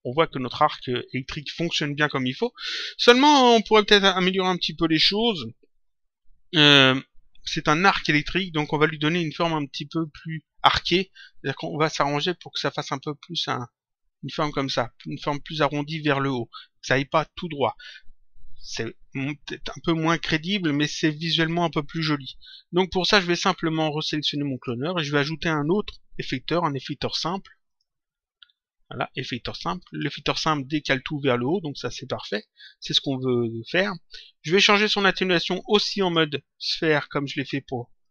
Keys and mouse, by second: 10.0 click, 24.5 click, 27.6 click, 29.8 click, 34.8 click, 35.9 click, 38.0 click.